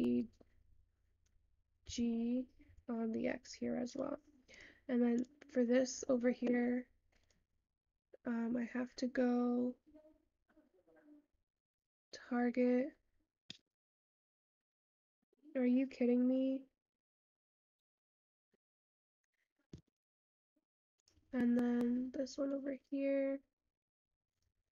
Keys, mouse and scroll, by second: 8.3 click.